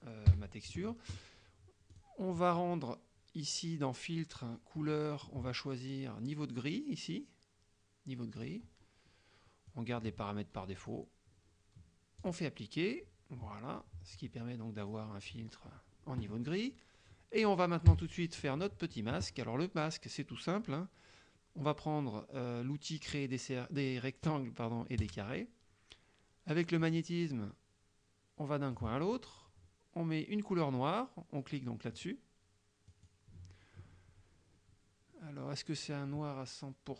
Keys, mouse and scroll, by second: 0.3 KP_Subtract, 2.0 click, 8.4 click, 9.7-11.2 drag, 12.3 click, 14.9 click, 18.0 KP_Subtract, 18.7-19.2 middle drag, 25.1 click, 26.9-29.0 drag, 32.0 click, 33.0 click.